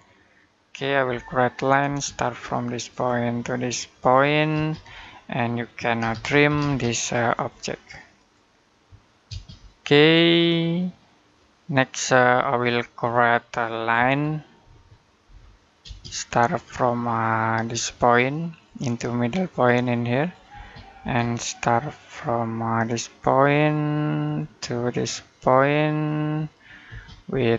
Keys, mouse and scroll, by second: 0.9 l, 1.7 space, 2.7 click, 4.3 space, 4.9 middle click, 5.8-6.3 typing, 7.1 click, 9.1 space, 12.1-12.6 scroll down 1, 12.6 middle click, 13.8 o, 14.5 Escape, 15.1 l, 15.7 space, 15.9-17.5 scroll down 1, 18.3 click, 20.3 space, 24.1 click, 26.7 space, 27.0 middle click, 27.3-27.5 scroll up 1.